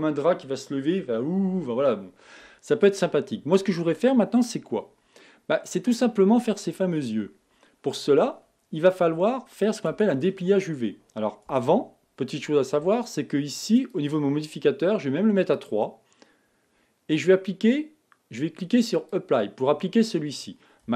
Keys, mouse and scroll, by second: 10.7 Tab, 16.4-19.9 drag, 20.9 click.